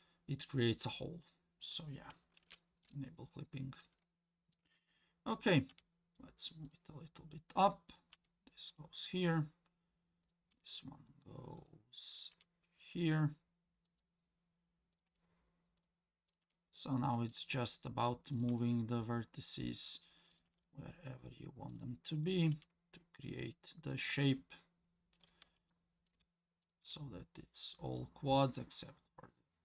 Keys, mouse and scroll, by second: 2.4 ctrl+z, 3.8 click, 5.7 g, 7.9 click, 8.1 g, 10.2 click, 10.5 g, 12.2 click, 12.3 g, 14.9 click, 15.1 g, 16.3 click, 16.4 g, 18.3 click, 18.5 g, 20.3 click, 20.5 g, 22.4 click, 22.5 g, 25.7 shift+middle click, 26.6 click, 26.8 g.